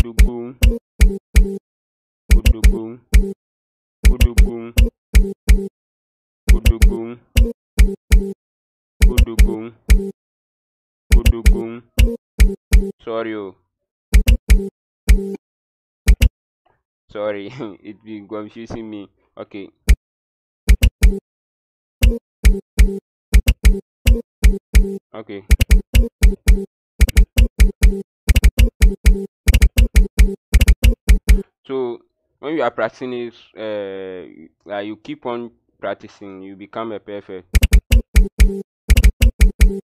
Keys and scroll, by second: 0.0-16.7 typing, 19.8-31.7 typing, 37.3-39.8 typing.